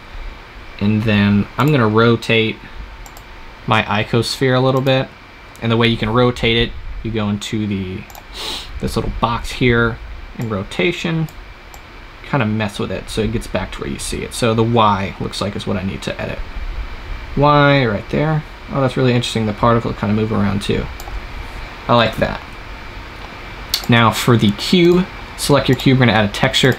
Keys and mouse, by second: 0.0-1.4 middle drag, 1.4-13.5 right drag, 23.6-26.7 drag.